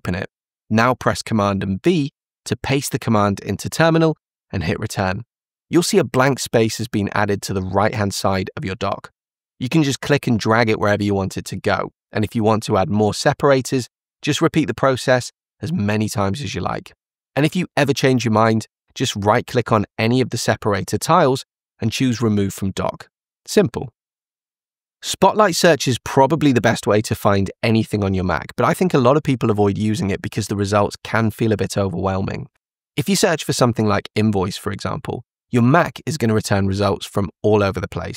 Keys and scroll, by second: 1.8 super+v, 16.7 super+v, 34.6 super+space.